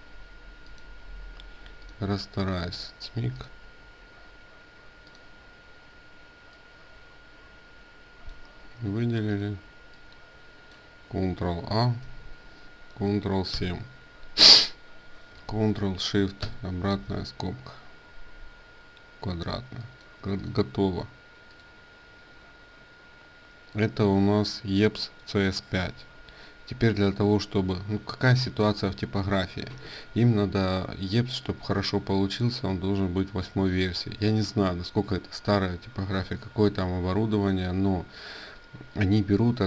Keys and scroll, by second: 11.8 ctrl+a, 13.1 ctrl+7.